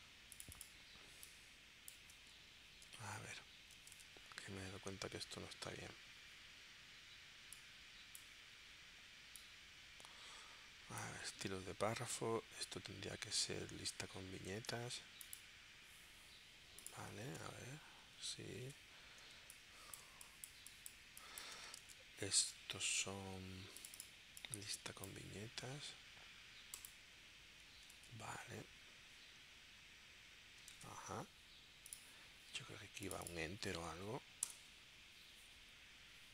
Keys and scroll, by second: 4.0 super+Tab, 17.3 super+Tab, 19.2 super+Tab, 19.4 space, 22.4 super+Tab, 23.0 super+Tab, 27.9 super+Tab, 30.7 super+Tab, 34.5 Return.